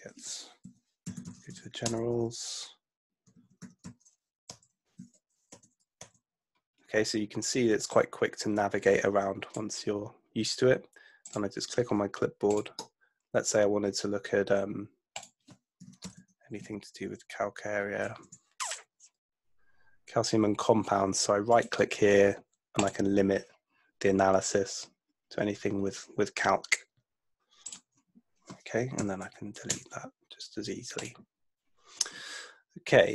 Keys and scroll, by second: 0.8 F2, 1.0-2.0 typing, 3.1-5.0 typing, 4.5 Return, 5.6 Return, 15.6-17.1 typing, 18.3 BackSpace, 29.1 BackSpace, 29.8 Return.